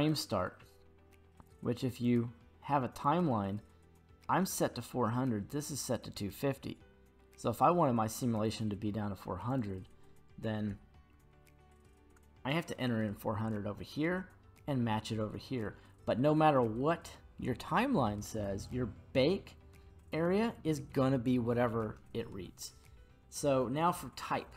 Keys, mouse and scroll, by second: 2.0-3.0 drag, 9.5-12.1 drag, 11.3 KP_0.